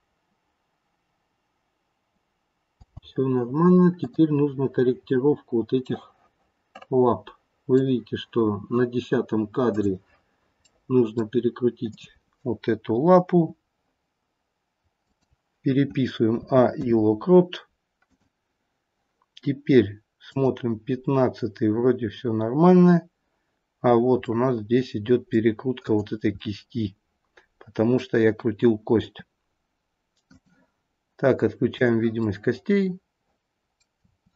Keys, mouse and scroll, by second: 2.8 space, 4.0 click, 5.1-5.8 scroll up 2, 5.8 scroll up 2, 6.0 middle click, 9.7 click, 10.6 middle click, 11.8 click, 13.3 r, 16.4 a, 16.7 i, 20.3 click, 23.9-24.3 scroll down 2, 24.3 middle click, 25.8 click, 27.1 middle click, 29.0 r, 31.6 click, 32.2 middle click, 33.9 r.